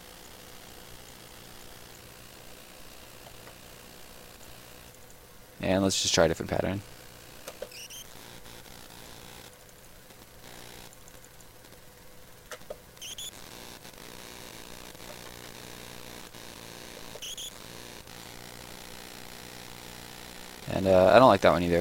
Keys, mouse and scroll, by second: 0.6 shift+right click, 2.5 shift+right click, 3.2 ctrl+right click, 4.3 click, 7.4 space, 8.5 right click, 9.4 click, 12.2 click, 12.5 space, 13.8 right click, 14.6 right click, 14.7 ctrl+right click, 14.8 ctrl+x, 15.4 shift+right click, 15.9 right click, 16.2 click, 16.9 space, 17.9 right click, 18.6 shift+right click.